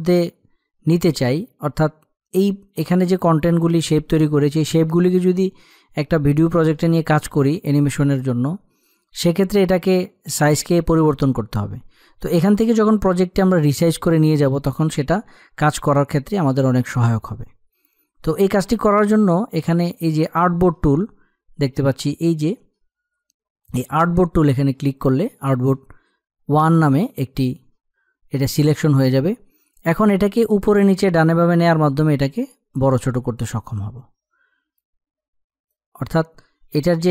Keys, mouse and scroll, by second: 23.5 click, 31.3-37.1 drag.